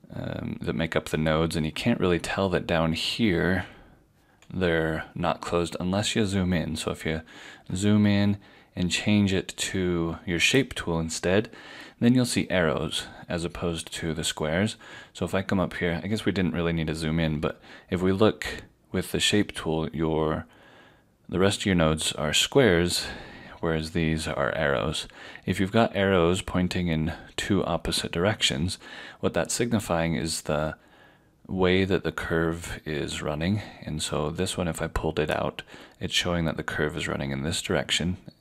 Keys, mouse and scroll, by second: 6.2 click, 7.2-7.6 scroll up 1, 10.5 click, 13.8 click, 13.8 scroll down 1, 34.1 click.